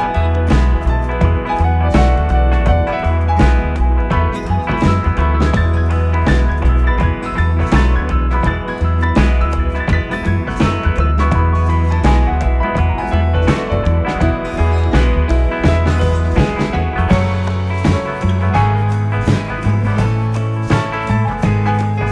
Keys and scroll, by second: 11.8 Delete, 16.8 4, 18.0 3, 20.4 ctrl+z, 20.7 ].